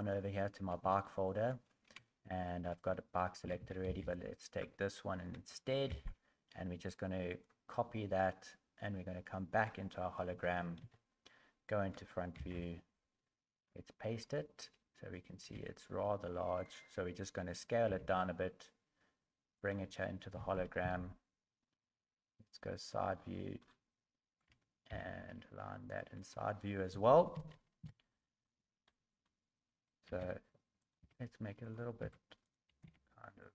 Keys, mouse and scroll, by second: 10.8 KP_1, 12.5 ctrl+v, 13.6-14.2 scroll down 10, 15.4 s, 17.9 g, 20.4 KP_1, 20.8 KP_3, 21.6-22.1 scroll up 7, 23.1-23.8 scroll down 15, 24.9 g, 27.3 KP_1, 27.8 KP_3, 28.5-29.7 scroll up 19, 30.1 s, 31.0 g, 32.0 s, 32.8 g.